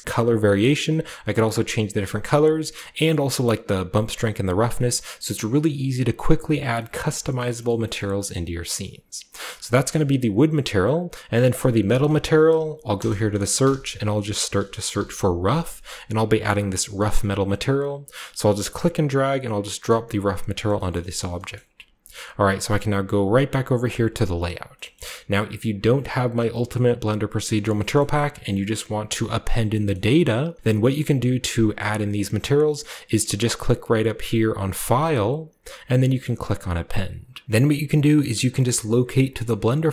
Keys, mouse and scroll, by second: 0.8 click, 1.3 click, 1.8 right click, 2.9-4.1 drag, 3.9 right click, 4.6-5.3 scroll down 2, 5.3 scroll down 1, 5.4-9.0 scroll up 4, 6.9 shift+middle click, 7.5 shift+middle click, 7.7 shift+middle click, 8.0-9.5 shift+middle drag, 11.8-12.9 drag, 12.9-14.9 typing, 15.8-17.3 drag, 18.7-20.7 drag, 20.5-23.8 scroll down 1, 20.9 shift+middle click, 21.5-23.8 shift+middle drag, 24.9-26.5 shift+middle drag, 25.0-26.5 shift+scroll up 1, 26.5-27.3 scroll up 1, 26.7 middle click, 27.6 middle click, 28.0-29.6 middle drag, 28.0 a, 29.9-31.5 middle drag, 33.0-34.3 scroll up 2, 34.8 click, 37.4 ctrl+w.